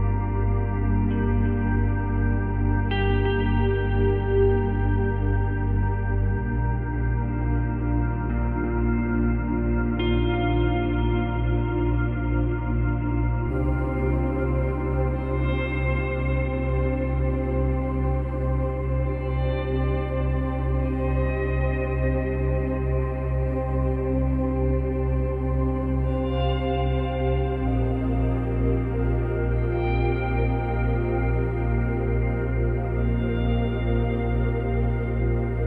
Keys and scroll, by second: 17.8 ctrl+z, 24.2 space, 32.5 ctrl+z.